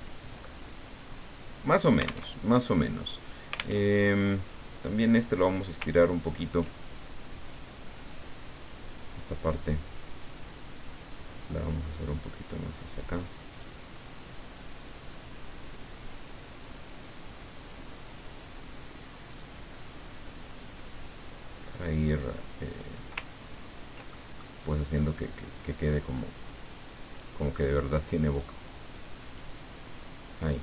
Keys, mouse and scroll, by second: 2.3 alt+Tab, 3.9 alt+Tab, 6.0-6.5 ctrl+scroll up 4, 7.5 click, 8.6 click, 10.1-13.2 drag, 13.5 click, 14.8 click, 16.1 click, 17.1-19.2 drag, 19.3 click, 20.4-23.5 drag, 23.5 ctrl+scroll down 1, 24.0 ctrl+middle click, 27.1 click, 28.3 click, 28.9 click, 29.5 click.